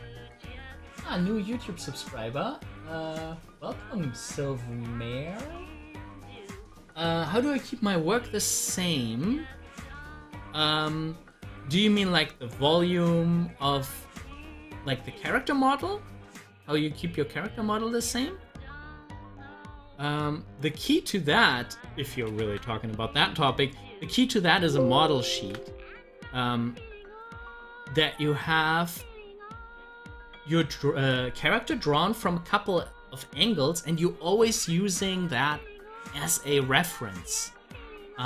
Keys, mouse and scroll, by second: 8.3 click, 8.4 scroll down 1, 9.5 scroll up 1, 10.2 scroll down 1, 13.8 scroll up 1, 34.6 scroll down 1.